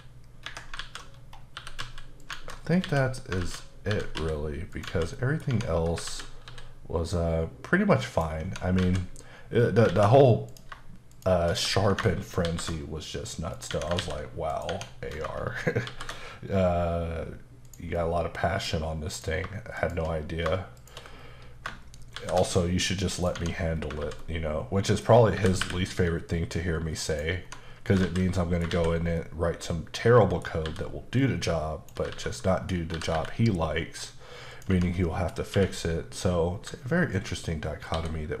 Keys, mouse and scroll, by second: 0.5 Escape, 0.8 alt+z, 1.2-1.6 scroll up 2, 1.6 e, 1.9 z, 2.2 click, 2.8 a, 3.4 alt+z, 4.2 g, 4.2 z, 4.7 click, 5.2 middle click, 5.5 Tab, 6.1 alt+z, 8.1 click, 8.5 Tab, 8.9 alt+z, 9.7 scroll down 1, 9.9 alt+a, 10.5 click, 11.1 shift+click, 11.5 click, 12.5 ctrl+shift+b, 13.6 right click, 13.7 Tab, 14.0 ctrl+a, 14.5 click, 14.7 Tab, 15.9 ctrl+shift+b, 17.3-17.7 scroll up 1, 17.7 click, 18.0 middle click, 19.1 click, 19.8 shift+click, 20.8 shift+click, 21.2-21.7 scroll up 1, 22.2 ctrl+shift+b, 23.2 click, 23.4 Tab, 23.8 alt+scroll down 1, 24.0 alt+z, 24.2 middle click, 25.1 scroll down 1, 25.4 typing, 27.1 click, 28.0 alt+z, 28.4 middle click, 28.7 alt+a, 29.2 middle click, 30.7 b, 31.2 click, 32.1 alt+z, 32.4 middle click, 32.9 scroll up 2, 32.9 typing, 34.5 click, 34.8 Tab, 35.0 middle click, 35.6 q, 37.2 ctrl+click.